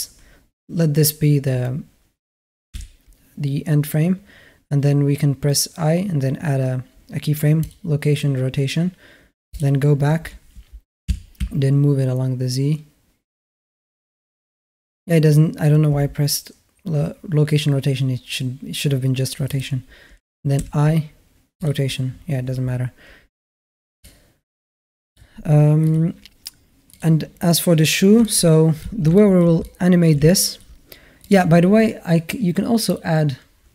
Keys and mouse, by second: 2.5 i, 10.9 r, 19.3-21.5 drag, 20.4 i, 23.8-25.0 drag, 28.0-28.6 middle drag, 29.0 shift+middle drag, 29.4-29.9 alt+middle drag, 30.1-30.4 shift+drag, 31.0 click, 32.7 click.